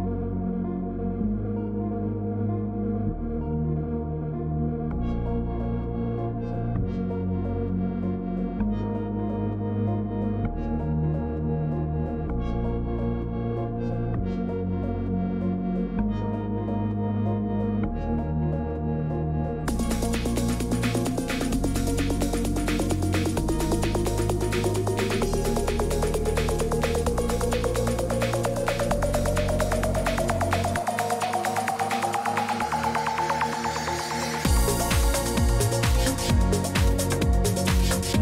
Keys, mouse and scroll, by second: 0.0-0.4 typing, 2.6-4.2 typing, 4.7 Return, 5.2 Return, 6.7-11.9 drag, 24.3 click, 27.6 click, 30.0 click, 31.0 click, 31.2 click.